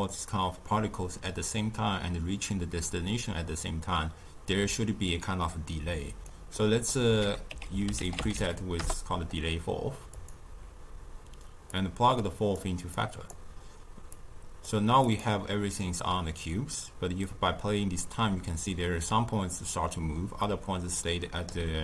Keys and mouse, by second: 6.5 middle click, 7.1 ctrl+a, 11.6-15.1 drag, 17.2-20.2 drag.